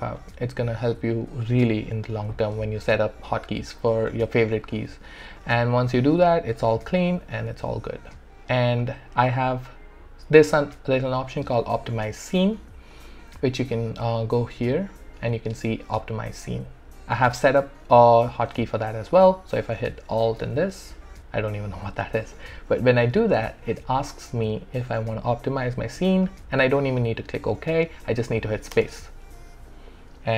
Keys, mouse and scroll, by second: 12.9 click, 18.6 click, 20.4 alt+`, 28.7 space.